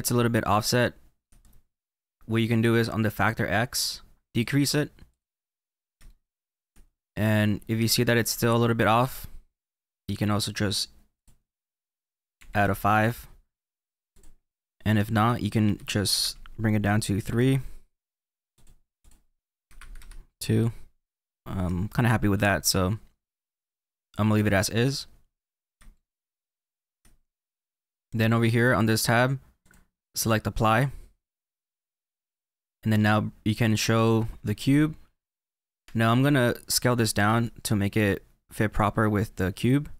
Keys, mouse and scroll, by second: 0.4 shift+middle click, 4.3 click, 5.0 click, 6.0 shift+middle click, 10.2 click, 14.0 click, 18.5 click, 21.2-22.3 scroll up 3, 21.3-28.9 middle drag, 24.7-25.8 scroll down 8, 29.5-32.5 drag, 33.9 click, 37.2 s.